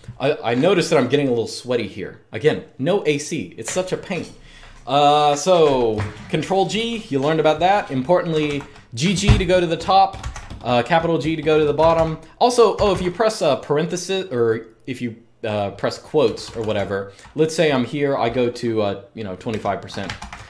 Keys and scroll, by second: 8.1 typing, 9.9 typing, 11.5-12.6 typing, 16.0-17.6 typing, 19.0-20.4 typing.